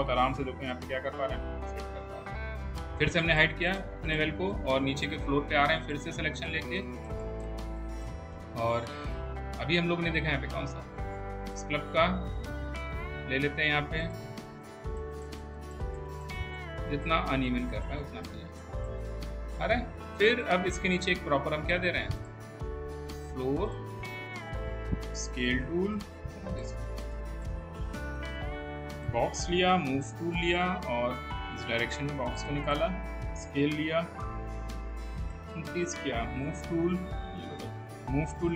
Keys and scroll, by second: 25.3 r, 29.6 w, 33.7 r, 36.3 w, 37.9 w.